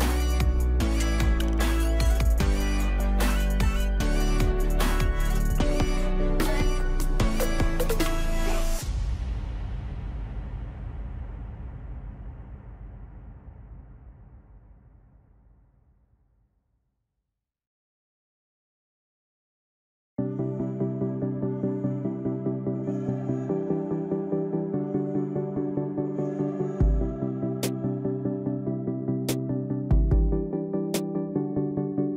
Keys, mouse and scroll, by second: 2.7-13.7 drag, 14.1 ctrl+click, 15.9 click, 19.8 click, 22.6 shift+click, 24.0 click, 25.5 alt+click, 26.5 ctrl+click, 30.4 click.